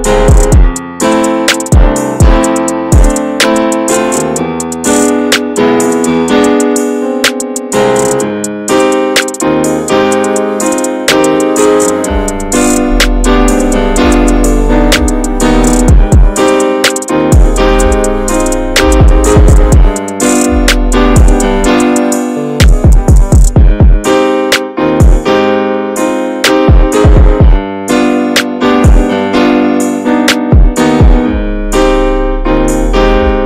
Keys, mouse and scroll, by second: 1.8 scroll up 1, 2.0-3.8 shift+middle drag, 3.8 x, 4.0 middle click, 4.2-4.9 scroll up 2, 4.4 middle click, 4.9 shift+middle click, 5.5-6.7 scroll up 3, 5.9 middle click, 6.2 shift+middle click, 6.7 click, 7.9 click, 8.1 scroll down 2, 8.3 shift+middle click, 8.7 scroll up 1, 9.0 Tab, 9.5 click, 9.7 Tab, 9.9 click, 10.3 shift+click, 10.5 shift+click, 10.7 shift+click, 10.9 shift+click, 11.2 shift+click, 11.6 shift+click, 12.0 shift+click, 12.4 shift+click, 13.1 click, 13.9 alt+middle click, 14.2 alt+middle click, 15.0 click, 17.2 middle click, 17.8 scroll up 1, 17.9 scroll down 2, 18.1-19.7 middle drag, 19.7 Tab, 19.8 click, 20.0 scroll down 1, 20.1-21.9 middle drag, 21.9 scroll down 2, 22.1-23.4 shift+middle drag, 23.4 click, 23.7 /, 24.0-24.5 middle drag, 24.5 Tab, 24.6-25.6 middle drag, 26.0 alt+z, 26.8-28.3 shift+middle drag, 28.3 click, 30.0-31.0 middle drag, 32.9 ctrl+click, 33.2 middle click.